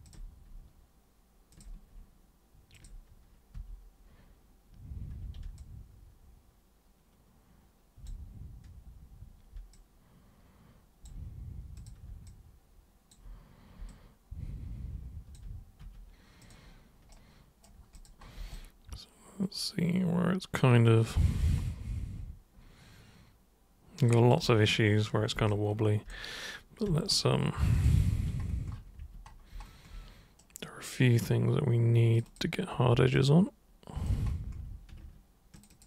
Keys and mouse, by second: 0.0 ctrl+super+click, 1.5 ctrl+super+click, 2.7 ctrl+super+click, 3.5 super+3, 5.1 super+1, 5.5-8.0 alt+super+drag, 9.7-11.0 alt+super+drag, 11.8 super+click, 12.3 alt+super+click, 13.9-15.3 alt+super+drag, 15.8 super+3, 16.4 super+click, 17.1 super+right click, 17.9 super+click, 18.5-24.3 alt+super+drag, 25.5 alt+super+click, 26.9 super+1, 27.7 super+click, 27.9 super+2, 29.0 super+1, 30.4 super+right click, 32.2 super+click, 33.2 alt+super+click, 35.6 ctrl+shift+super+click, 35.7 ctrl+shift+super+click.